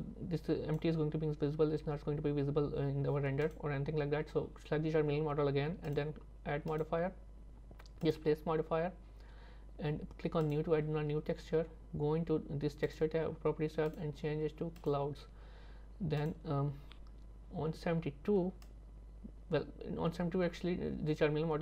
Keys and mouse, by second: 0.0 click, 6.7-8.2 drag, 12.9 click, 14.0 click, 16.2 click, 18.7-21.6 drag.